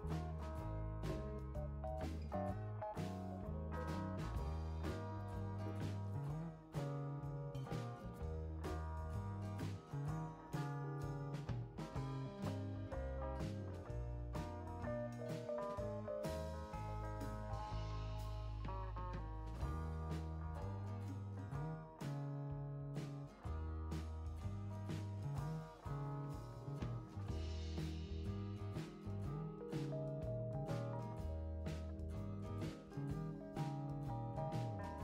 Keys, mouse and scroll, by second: 2.0 click, 3.9 6, 5.6 click, 8.8 click, 14.7 click, 21.3 click, 24.2 click, 25.7 scroll down 2, 26.6 right click, 28.8 click, 33.8 click.